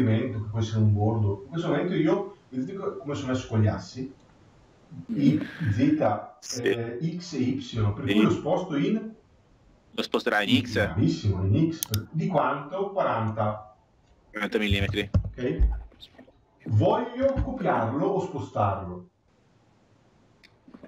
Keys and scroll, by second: 14.9 Return.